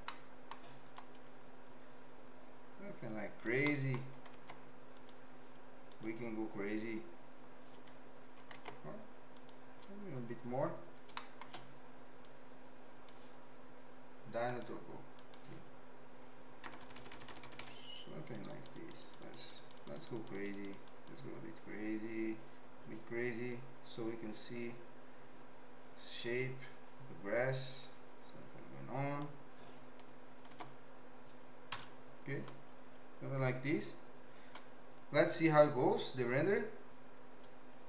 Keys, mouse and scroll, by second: 0.0 middle click, 0.9-3.5 drag, 3.6 middle click, 4.3 ctrl+Tab, 5.9-7.6 right drag, 8.5 ctrl+Tab, 11.2 shift+middle click, 12.2 click, 14.5 click, 16.7-17.7 typing, 17.8 click, 19.2 click, 19.6 click, 19.9 click, 20.2 click, 20.6 click, 20.7 click, 21.1-29.2 drag, 30.5 ctrl+Tab, 31.7 KP_0.